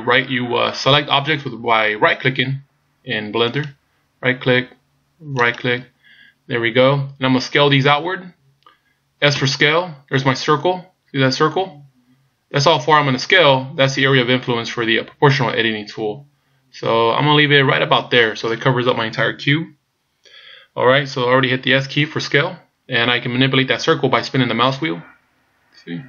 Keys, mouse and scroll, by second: 3.5 shift+right click, 5.4 shift+right click, 9.4 s.